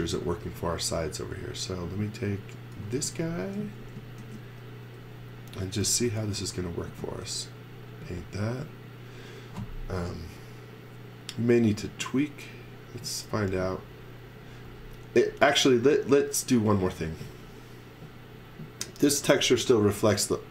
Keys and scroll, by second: 0.0-0.6 typing, 2.5-4.2 typing, 5.8 n, 11.7 space.